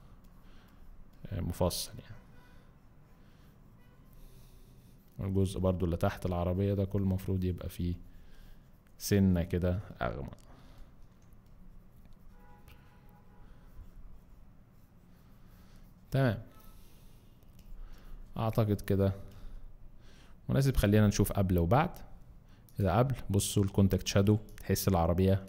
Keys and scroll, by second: 10.0 z, 17.7 space, 19.2 z, 20.6 space, 24.3 alt+space.